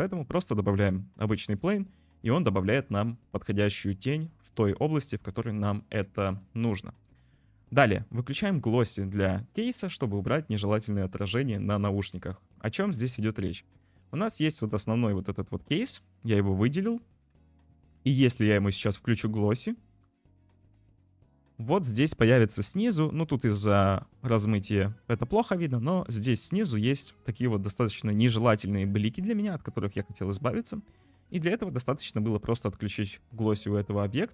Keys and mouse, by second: 0.8 `, 1.5 ctrl+s, 6.1 ctrl+s, 8.1-11.9 drag, 12.2 shift+middle drag, 12.9 ctrl+s, 16.7 shift+middle click, 18.4 shift+middle click, 20.0 click, 31.1-31.5 shift+middle drag, 32.1 shift+middle drag, 33.6 click.